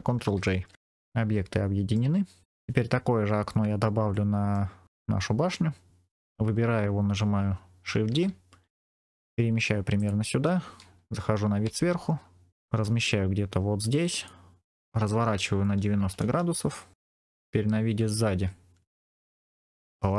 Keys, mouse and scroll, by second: 0.4 ctrl+j, 0.7-1.9 middle drag, 2.1-2.4 scroll down 2, 2.8-3.4 scroll down 3, 4.0 middle click, 8.0 shift+d, 9.9 click, 11.5 KP_7, 12.5 shift+middle click, 12.7 g, 14.1 click, 14.9 r, 15.9 KP_9, 16.1 KP_0, 16.8 KP_Enter, 16.9 middle click, 16.9-17.3 scroll down 3, 17.3 KP_3, 18.2 ctrl+KP_3, 19.0-19.6 scroll up 4, 19.3 shift+middle click, 20.0 r.